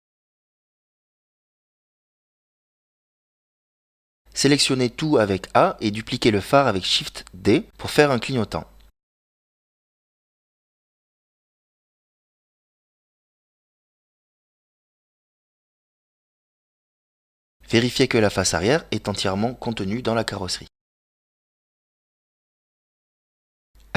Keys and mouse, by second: 2.3 a, 4.2 click, 4.9 a, 6.1 shift+d, 11.4 s, 14.4 g, 17.4 KP_Decimal, 18.3-20.4 middle drag, 20.8 middle click, 22.6 middle click.